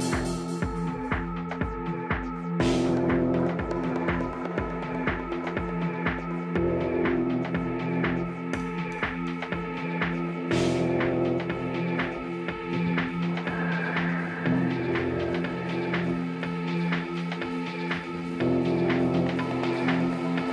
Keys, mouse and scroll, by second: 3.4 shift+s, 6.2 Tab, 9.4 ctrl+alt+shift+c, 12.0 middle click, 13.2 a, 14.4 shift+c, 15.7-17.9 middle drag, 17.5 a, 17.9 a, 20.4-20.5 middle drag.